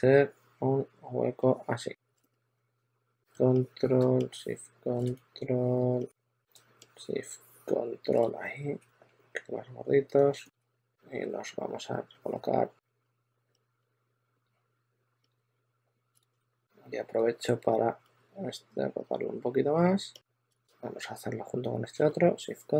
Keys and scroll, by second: 0.1 shift+super+d, 2.0 shift+super+x, 2.3 w, 10.5 w, 12.9 w, 13.9-16.2 typing, 16.0 super+a, 18.7 w, 19.8 w, 20.2 w, 20.4 super+z, 20.4 super+z.